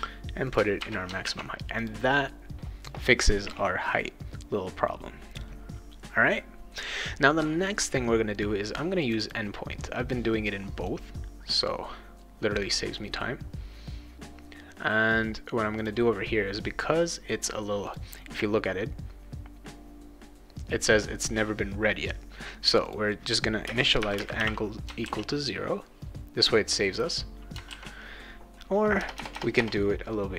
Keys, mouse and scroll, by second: 0.5 click, 1.3 ctrl+s, 1.8 click, 9.0 click, 10.5 click, 12.6 click, 15.8 click, 17.8 click, 22.9 click, 23.7 space, 24.0 =, 24.2 space, 24.4 0, 25.0 ctrl+s, 29.0 BackSpace, 29.1 BackSpace, 29.3 BackSpace.